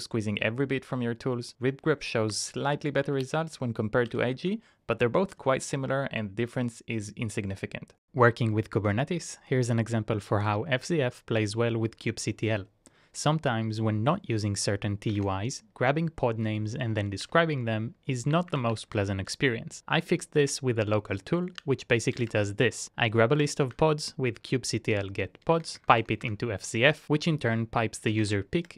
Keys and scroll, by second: 3.0-4.6 typing, 12.2 typing, 17.2 alt+space, 18.5 shift+\, 18.8 space, 21.6-23.4 typing, 23.9 Return, 25.6 Up, 25.8 Up, 25.9 Up, 26.4 Return, 28.2 Up, 28.6 BackSpace.